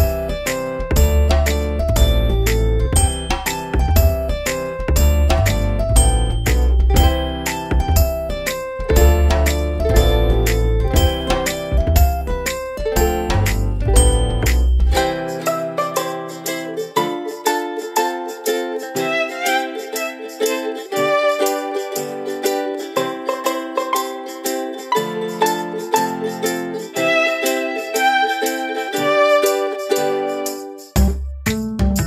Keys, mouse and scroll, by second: 5.0-6.1 typing, 7.6 ctrl+a, 8.6 click, 13.0 Right, 13.5 Return, 14.1-18.1 typing, 18.4 Return, 19.8 click, 22.9 click, 25.9 click, 28.2-30.2 scroll down 1, 30.6-31.0 typing, 31.6 Return.